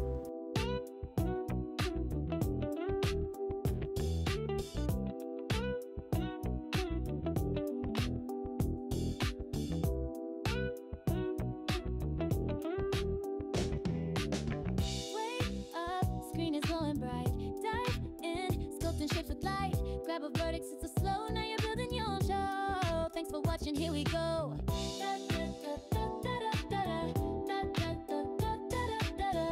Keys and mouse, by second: 0.4 g, 2.3 click, 3.1 click, 3.8 g, 6.5 g, 7.9 click, 11.7 g, 13.6 click, 14.7 g, 16.2 click, 17.8 shift+click, 18.8 g, 26.5 g, 28.7 click.